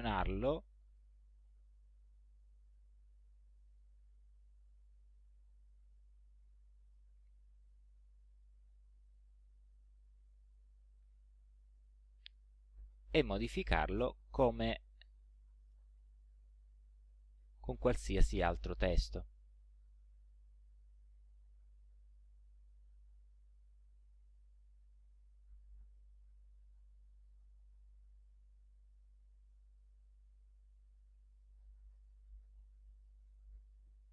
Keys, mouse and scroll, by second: 0.9 click, 2.3-2.6 scroll up 1, 2.7 alt+click, 3.6-4.0 alt+scroll up 1, 5.6 click, 6.9 click, 7.7 click, 8.2 click, 9.1 alt+click, 10.5 click, 13.3 ctrl+Left, 14.4 ctrl+Right, 15.7 ctrl+space, 16.2 ctrl+Right, 18.1 ctrl+space, 18.8 ctrl+Right, 20.9 Left, 21.2 space, 21.9 ctrl+Left, 24.4 click, 26.3 ctrl+Left, 27.1 ctrl+shift+Left, 27.3 ctrl+shift+Left, 30.8 click, 31.9-33.4 typing.